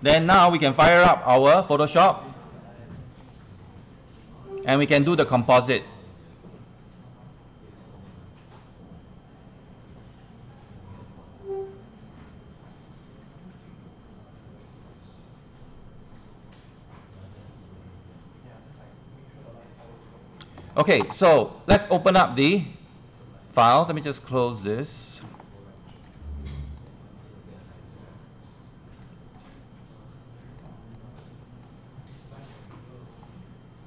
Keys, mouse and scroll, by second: 19.4 click, 20.9 click, 27.5 click, 29.0-33.5 drag.